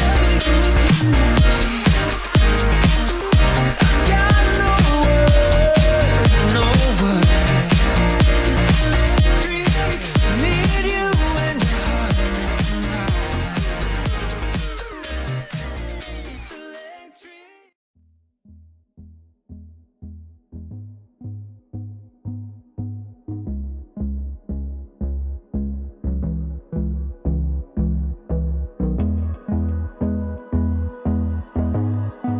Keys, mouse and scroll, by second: 1.3 click, 2.6 ctrl+z, 2.9 click, 3.2-3.6 scroll down 1, 6.1 click, 7.2-7.6 scroll down 1, 8.9 click, 11.1 click, 14.1 double click, 16.0 click, 18.1 click, 22.9 ctrl+c, 23.1 ctrl+v, 31.5-32.2 typing.